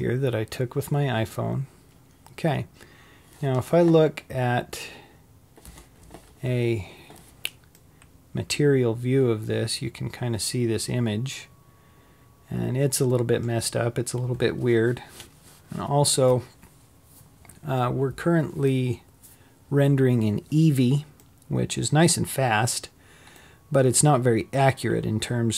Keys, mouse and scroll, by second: 0.0 click, 5.1 click, 8.0-11.0 middle drag, 21.4-25.5 middle drag.